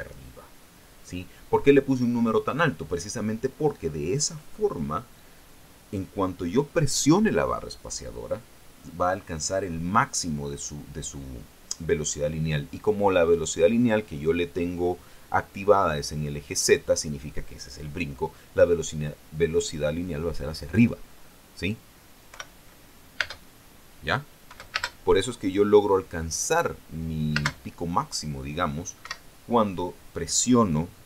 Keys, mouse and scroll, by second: 22.8 p, 23.7 space, 25.3 space, 27.9 space, 29.5 Escape.